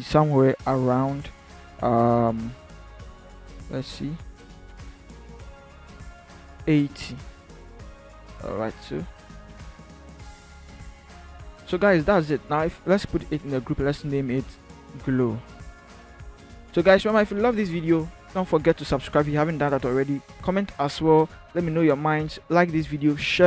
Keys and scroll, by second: 9.0 ctrl+-, 10.9 ctrl+0, 12.2 ctrl+-, 15.0 ctrl+g, 16.6 Caps_Lock, 17.2-17.8 typing.